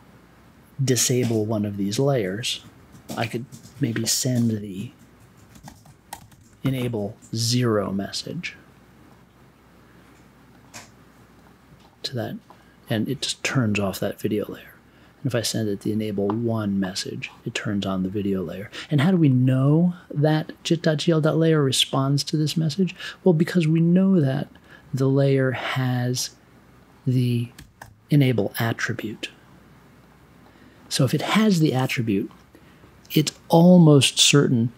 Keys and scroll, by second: 5.2-7.1 typing, 15.8 1, 27.3-28.2 typing.